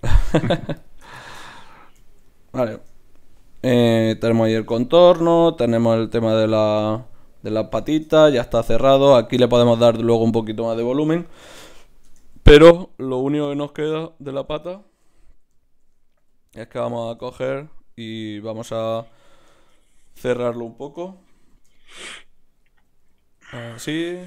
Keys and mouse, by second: 1.2 right click, 2.7 Tab, 6.0 Tab, 12.1 Tab, 13.5 ctrl+Tab, 14.3-16.0 drag, 14.6-16.2 middle drag, 15.0 KP_Divide, 16.2 KP_1, 19.1 z, 19.9 z, 20.9 KP_Divide, 21.4 z, 23.0 e.